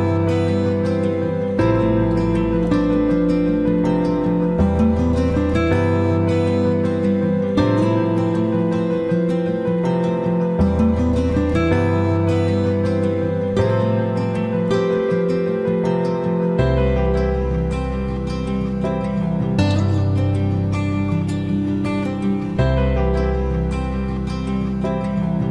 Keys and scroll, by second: 13.2 ctrl+c, 13.6 ctrl+f.